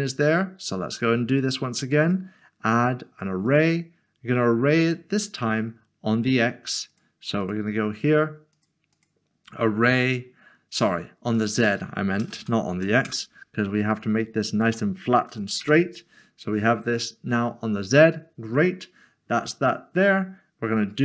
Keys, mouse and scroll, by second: 1.3 click, 5.3 click, 6.9 click, 8.9 double click, 11.3 click, 12.2-12.7 typing, 13.0 Return, 14.5 click, 15.3 typing, 16.8 Return, 20.9 Return.